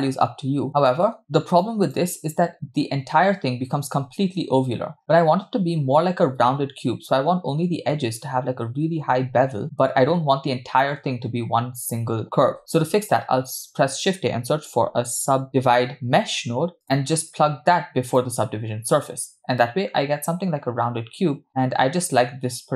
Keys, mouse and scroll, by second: 0.7 middle click, 1.7 click, 17.3-18.9 drag.